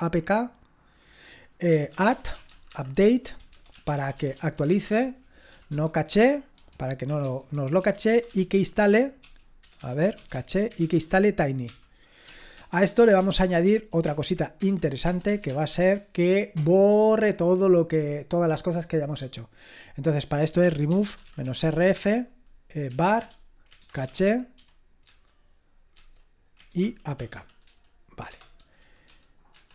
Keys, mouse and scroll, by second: 1.7-16.0 typing, 20.4-29.1 typing, 29.5 Escape.